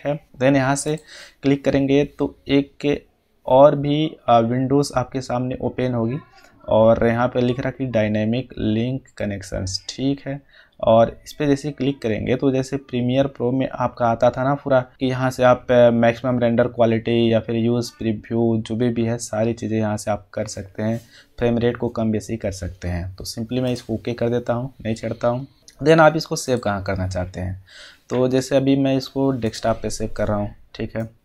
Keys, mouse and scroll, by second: 23.6 click, 27.8 click, 29.4 click.